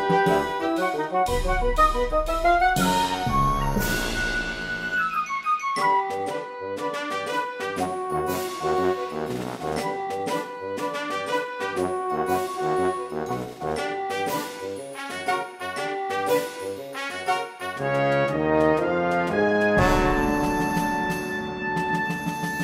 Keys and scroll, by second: 17.3 space, 21.2 space.